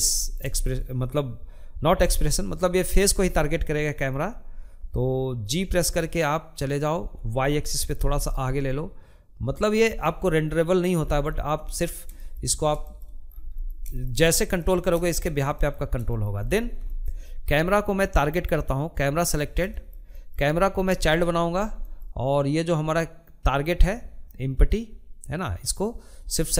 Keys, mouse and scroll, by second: 0.4 g, 1.6-5.4 middle drag, 5.4 g, 8.4 scroll down 2, 8.6 middle click, 9.7-11.0 shift+middle drag, 11.0 scroll up 1, 11.2 shift+middle click, 11.6-11.9 scroll down 1, 11.9-17.4 middle drag, 17.4 click, 18.1-19.9 shift+middle drag, 19.9 scroll up 1, 20.2-23.8 shift+middle drag, 23.8 shift+click, 24.7 scroll down 2, 25.1-26.5 shift+middle drag.